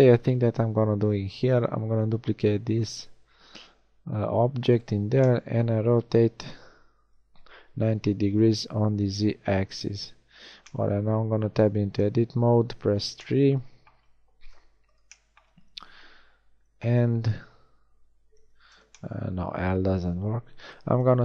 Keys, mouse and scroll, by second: 2.7 shift+d, 6.2 r, 10.3 Tab, 12.0 KP_3, 12.9 z, 14.5 KP_3, 17.1 l, 18.3 a, 20.5 b.